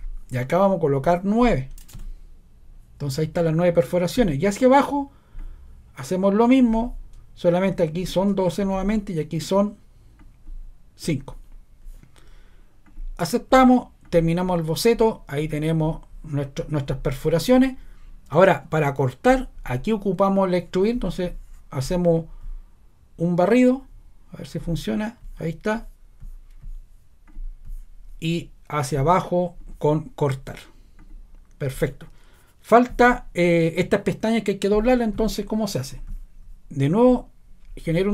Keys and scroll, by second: 1.7-2.4 typing, 8.6 typing, 11.0 5.